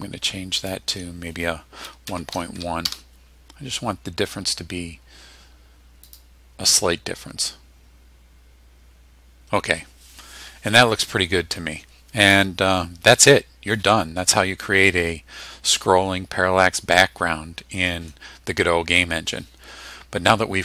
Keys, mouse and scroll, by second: 0.6 click, 1.9 KP_1, 2.1 KP_Decimal, 2.3 KP_1, 2.9 KP_Enter, 6.1 click.